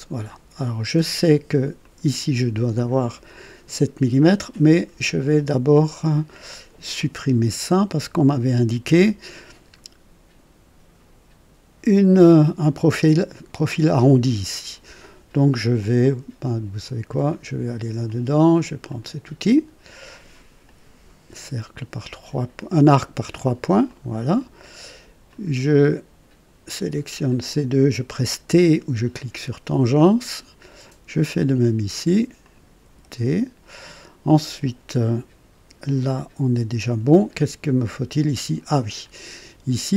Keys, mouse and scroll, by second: 0.2 right click, 1.8 click, 5.0-5.3 scroll up 1, 5.4 right click, 8.8 Delete, 16.0 click, 17.1 click, 18.0 click, 18.9 click, 20.6 click, 22.6 click, 23.8 click, 24.3 right click, 25.3 click, 27.2 click, 29.5 t, 31.3 click, 32.4 click, 32.6 typing, 38.7 click.